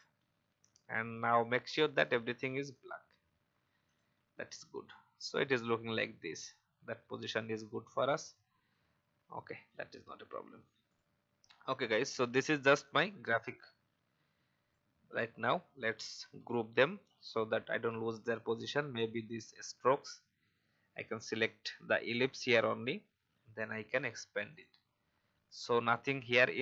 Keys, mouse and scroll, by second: 0.7-1.1 alt+scroll up 1, 1.9 click, 8.1 alt+scroll up 1, 9.4-9.9 alt+scroll down 1, 10.3-10.9 alt+scroll down 1, 10.9 click, 11.4-11.9 scroll up 1, 12.1 alt+scroll down 1, 12.6-15.5 drag, 17.7 click.